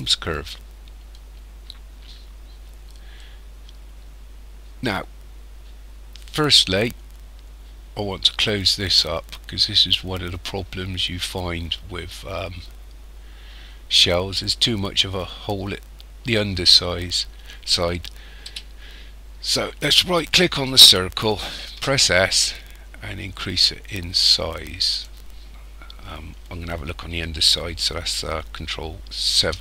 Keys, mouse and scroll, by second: 1.1 scroll down 3, 2.4-3.1 scroll up 1, 3.1 middle click, 6.1-6.5 scroll down 2, 14.8-16.0 scroll up 3, 16.0-17.0 scroll down 3, 18.5 KP_1, 19.8 right click, 21.7 s, 29.4 ctrl+KP_7.